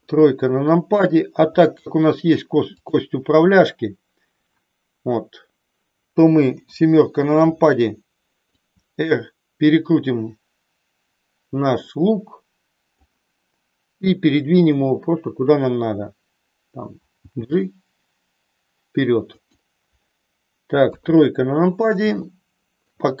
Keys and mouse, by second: 2.7 click, 6.6 KP_7, 8.5-13.1 drag, 17.2 g, 20.8 KP_3, 22.2 shift+middle click.